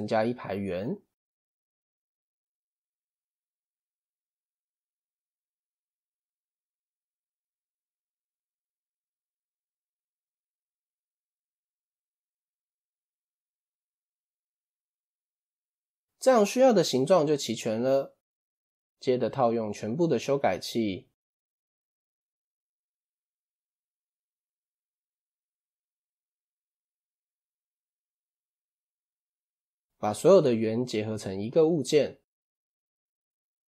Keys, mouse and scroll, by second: 0.4 click, 1.8 Tab, 3.1 scroll up 2, 3.4-4.2 shift+middle drag, 4.2 click, 5.8 shift+a, 7.3 shift+s, 9.1 shift+a, 11.0-11.4 shift+middle drag, 11.4-12.6 scroll down 1, 12.6 p, 13.9 Tab, 14.7-17.4 shift+middle drag, 17.4 click, 18.3-19.2 shift+middle drag, 19.2 click, 20.9 click, 22.7 click, 23.4 click, 24.1 click, 25.0 click, 26.1 click, 26.9 click, 27.8 click, 28.3 click, 28.7-29.0 scroll down 2, 29.0-29.7 shift+middle drag, 29.7-30.2 drag, 32.7 ctrl+j.